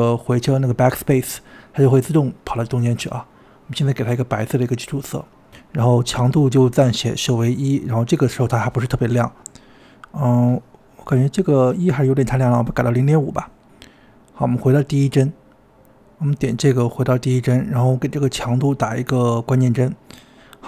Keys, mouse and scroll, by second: 2.0 click, 10.7-12.8 drag, 16.9-19.7 drag.